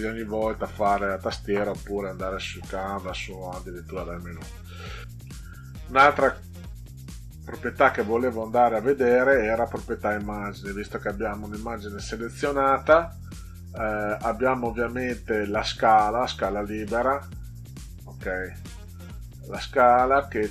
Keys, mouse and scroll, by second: 9.4 click, 19.0 click.